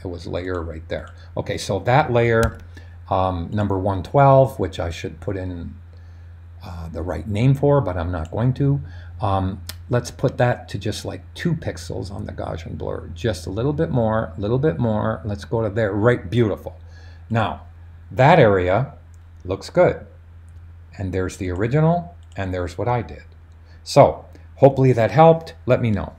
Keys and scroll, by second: 2.4 super+d.